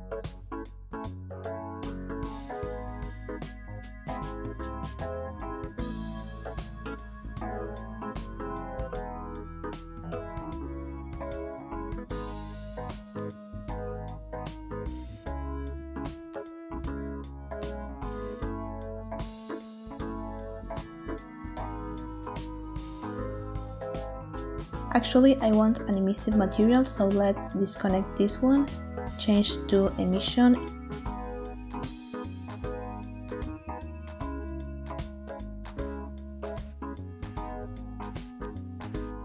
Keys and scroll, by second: 0.6 typing, 8.2 ctrl+v, 8.7 Return, 13.6 ctrl+v, 14.4 Return, 19.9 ctrl+t.